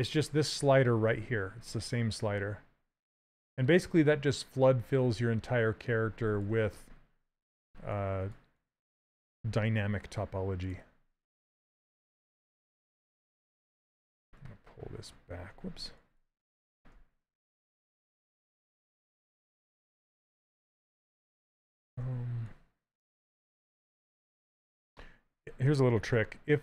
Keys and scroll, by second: 14.3 shift+z, 15.8 shift+z, 16.6 w, 17.9 q, 25.7 s.